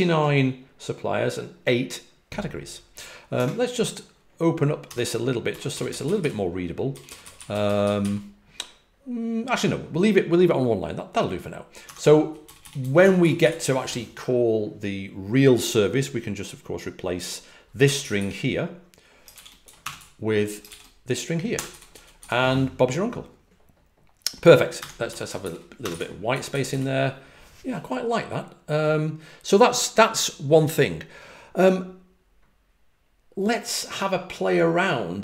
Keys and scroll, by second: 3.0-7.0 typing, 11.9-13.3 typing, 17.9 typing, 19.5-22.6 typing, 24.7-27.1 typing.